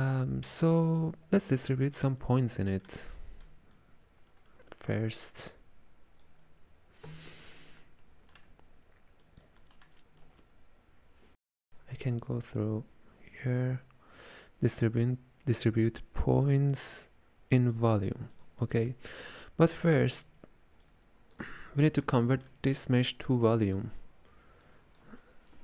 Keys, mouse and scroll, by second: 2.0-3.8 ctrl+middle drag, 3.8-6.8 ctrl+drag, 7.4 w, 7.9-9.3 middle drag, 9.3 click, 9.7 middle click, 10.3 space, 12.0 shift+a, 18.7-20.9 middle drag, 20.9 click, 21.7-23.6 ctrl+middle drag, 23.6 click, 24.7 click.